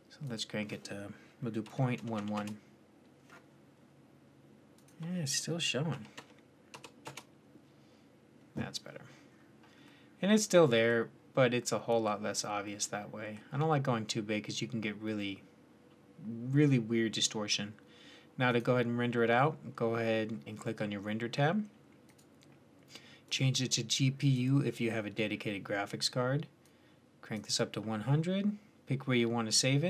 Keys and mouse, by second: 2.0 KP_1, 4.6 click, 7.4 middle click, 7.6 middle click, 9.1-9.9 middle drag, 10.0 middle click, 10.2 middle click, 10.4 middle click, 10.6 middle click, 10.8 middle click, 12.0-13.7 middle drag, 18.3-20.2 drag, 21.9-24.4 drag, 26.5-29.5 drag, 29.5 middle click.